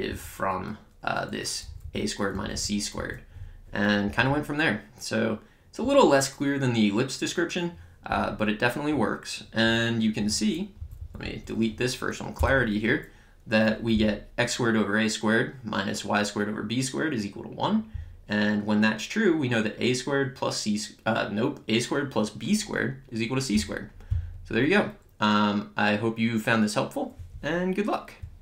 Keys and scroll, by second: 2.3 Down, 2.9 Up, 4.0 Down, 10.7 Up, 12.4 BackSpace.